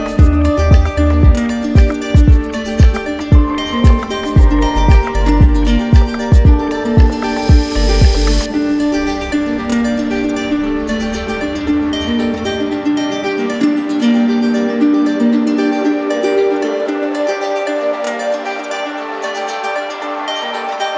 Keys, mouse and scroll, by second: 0.1 click, 1.2 click, 1.7 ctrl+z, 2.2 ctrl+z, 2.7 ctrl+z, 3.2 ctrl+z, 4.2 ctrl+z, 4.8 ctrl+z, 6.1 click, 6.7 shift+click, 7.4 ctrl+click, 8.5-9.2 typing, 10.1 click, 11.0 click, 12.5 click, 12.7 ctrl+z, 13.0 ctrl+z, 13.3 ctrl+z, 13.5 ctrl+z, 19.0 click.